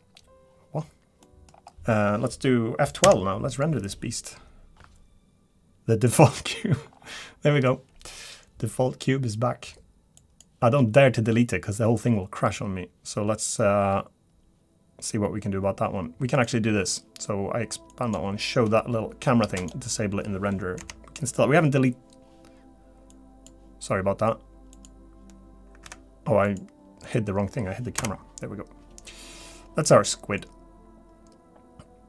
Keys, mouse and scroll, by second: 0.2-1.2 scroll down 1, 1.2 middle click, 1.5 scroll down 2, 1.7 shift+middle click, 16.3 click, 19.6 click, 20.9 F12, 23.5 F12, 24.7 click, 26.4 click, 28.0 click.